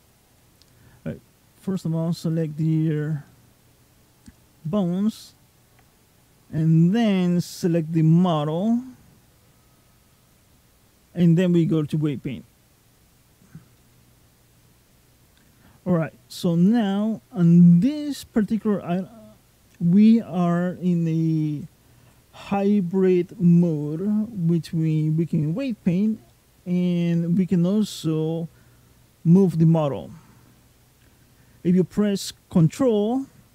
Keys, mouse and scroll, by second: 1.1 click, 1.5 click, 2.1 click, 5.0 shift+click, 10.0 click, 13.6 middle click, 17.2 middle click, 26.1 middle click.